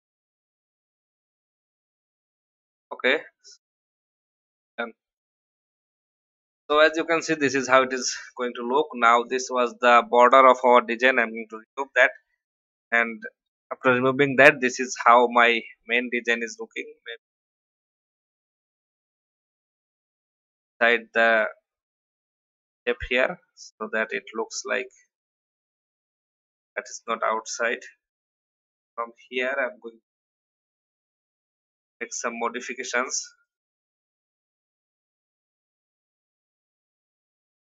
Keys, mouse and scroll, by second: 1.5 ctrl+g, 2.5 shift+click, 3.3 click, 6.0 alt+scroll down 1, 7.4-7.9 alt+scroll down 1, 9.1 click, 10.6 Delete, 11.8 click, 13.9 Delete, 15.3-15.7 alt+scroll up 1, 16.1 click, 17.3 shift+Up, 18.1 Down, 18.3 Down, 19.5-19.9 scroll up 1, 20.3 click, 22.6 Down, 23.1 click, 24.0 click, 25.5 click, 31.4 right click, 32.2-37.6 drag.